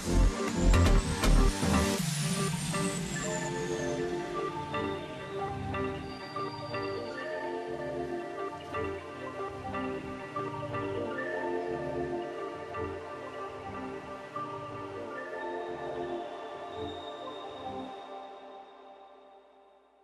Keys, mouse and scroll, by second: 4.0 double click, 4.2 space.